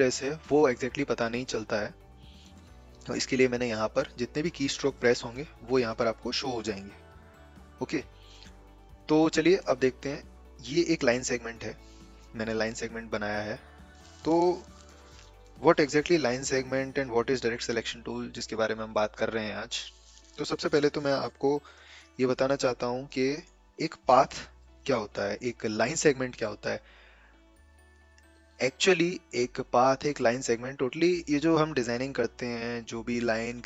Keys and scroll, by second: 21.7 Escape.